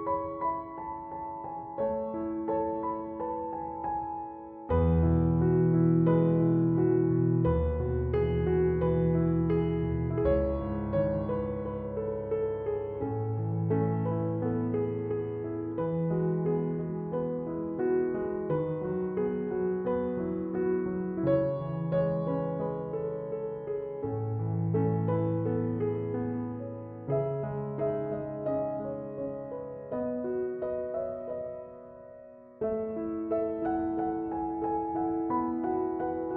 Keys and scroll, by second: 18.3 typing.